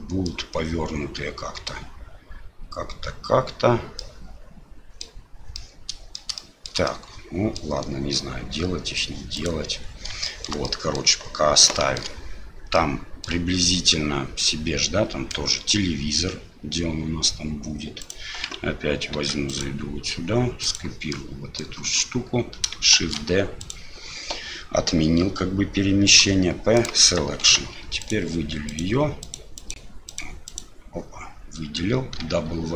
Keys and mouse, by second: 0.3-1.7 middle drag, 4.0-5.0 middle drag, 5.6-6.1 middle drag, 6.4-6.7 shift+middle drag, 6.9-7.6 middle drag, 8.1-9.0 middle drag, 9.4 click, 10.3 shift+middle drag, 10.7 middle drag, 11.7 shift+middle drag, 12.7-13.3 middle drag, 14.4-15.3 middle drag, 18.0 right click, 19.2 Tab, 19.5 right click, 20.6 right click, 21.1 click, 23.0 shift+d, 27.4 Tab, 28.0 click, 28.7 click, 29.2 click, 29.6 click, 30.1 click, 30.4 click, 32.2 w.